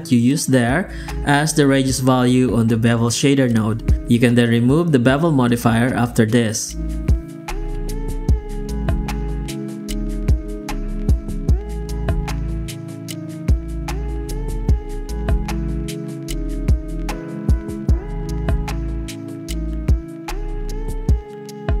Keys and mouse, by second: 1.5 ctrl+z, 2.4 click, 3.8 ctrl+v, 4.6 z, 8.2 KP_0, 9.0 KP_0, 9.3 alt+shift+z, 10.2 ctrl+alt+b, 12.0 click, 13.9 click, 14.5 click, 16.6 middle click, 17.3 click, 20.1 click, 21.2 click.